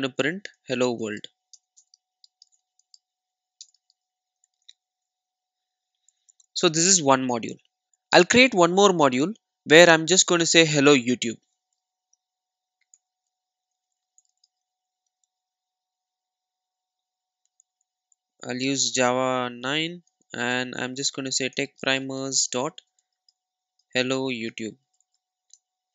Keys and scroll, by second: 5.0 super+s, 11.7 super+n.